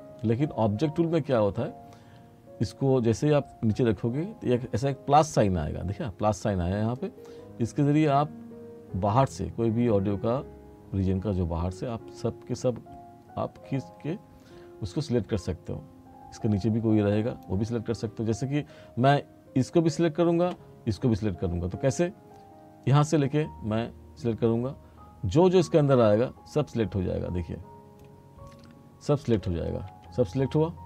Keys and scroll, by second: 29.5 r.